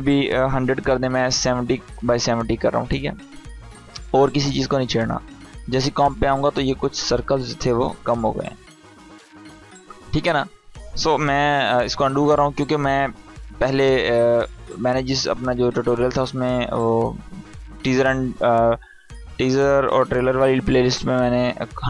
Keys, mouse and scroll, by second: 1.3 Tab, 3.2-9.3 drag, 11.4 ctrl+z, 14.1-14.7 drag.